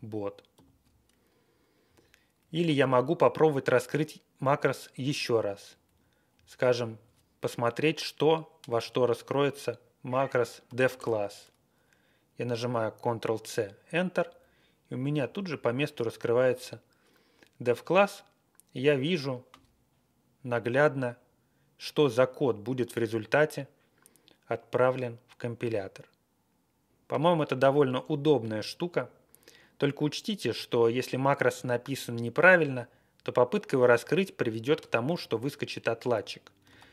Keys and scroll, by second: 0.5 alt+,, 1.8 Page_Down, 1.9 Down, 2.4 Up, 2.6 Up, 3.0 Down, 4.4 Up, 5.6 Up, 5.8 Up, 6.3 Left, 7.0 Left, 10.7 ctrl+c, 11.0 Return, 15.1 Page_Down, 15.3 Page_Down, 15.8 Down, 15.8-16.4 Right, 36.6 ctrl+x, 36.7-36.9 typing.